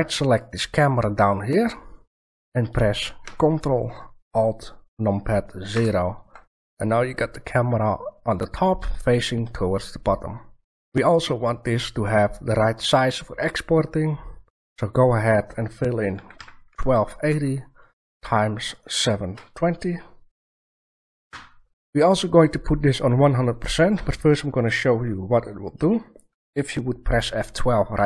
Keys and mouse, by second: 0.2-2.0 right drag, 5.6 ctrl+alt+KP_0, 15.0-16.8 drag, 18.6-20.6 drag.